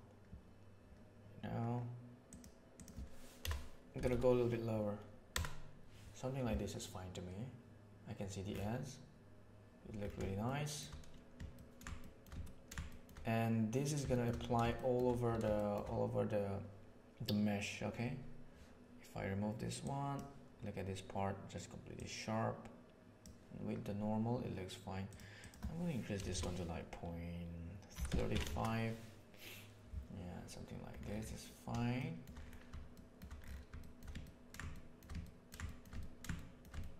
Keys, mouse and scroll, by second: 2.2-6.3 drag, 10.5 shift+middle click, 11.5 ctrl+middle click, 12.0 shift+middle click, 12.4 ctrl+middle click, 12.8 shift+middle click, 14.0 shift+middle click, 14.7 shift+middle drag, 15.4 shift+middle drag, 19.8 click, 21.9-23.2 drag, 25.0-29.8 drag, 26.2 BackSpace, 31.9-32.2 shift+middle drag, 33.0 shift+middle click, 33.7 shift+middle drag, 34.1-34.4 ctrl+middle drag, 34.7 shift+middle click, 35.1 ctrl+middle click, 35.6 shift+middle click, 35.9 ctrl+middle click, 36.3 shift+middle click, 36.8 ctrl+middle click.